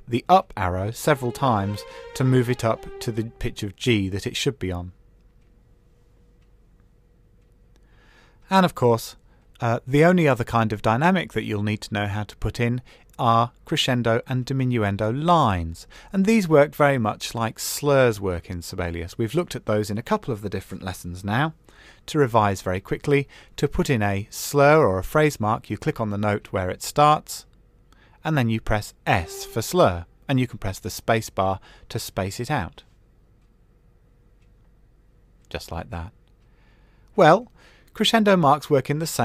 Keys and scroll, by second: 1.8 Down, 36.8 super+z.